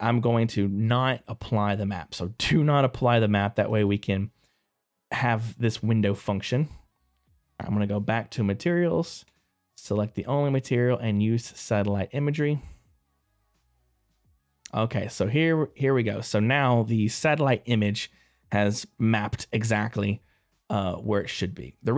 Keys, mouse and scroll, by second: 3.1 click.